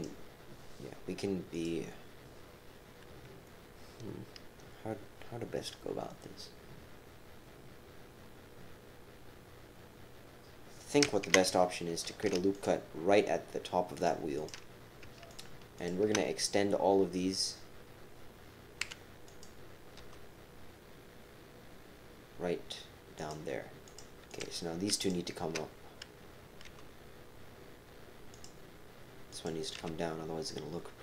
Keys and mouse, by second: 1.6 click, 12.0 ctrl+r, 14.3 click, 15.3 shift+click, 15.7 shift+click, 18.8 e, 19.9 g, 23.8 click, 24.3 click, 25.0 shift+click, 26.6 g, 29.3 click, 29.8 g.